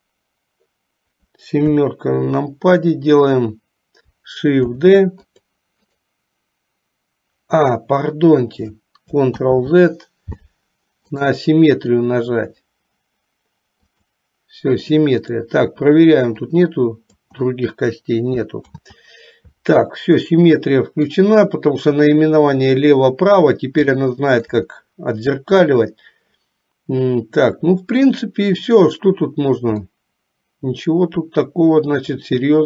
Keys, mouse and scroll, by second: 1.6 KP_7, 4.8 shift+d, 6.0-7.9 right drag, 9.4 ctrl+z, 11.3-14.4 right drag, 15.3 click, 16.7 click, 18.8 ctrl+z, 20.4-21.4 middle drag, 24.0 shift+middle click, 24.9-28.8 middle drag, 29.9-32.6 middle drag.